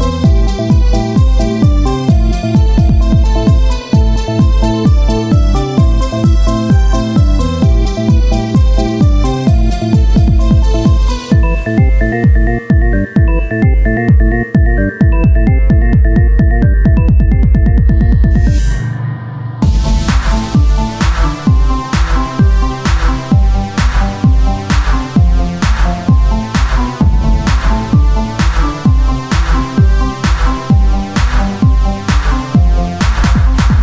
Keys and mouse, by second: 0.8 Tab, 0.8 ctrl+r, 2.5 ctrl+r, 4.0 click, 4.0 right click, 4.5 Tab, 5.0-17.7 drag, 7.6 Tab, 8.6 ctrl+Tab, 11.3-12.8 right drag, 14.4 right click, 15.1 right click, 17.8 Tab, 19.6 Tab, 19.6-21.7 drag, 21.8 Tab, 27.2-28.3 right drag, 28.5 KP_3, 29.3 r, 31.7 s, 32.7 Tab, 33.5 Tab.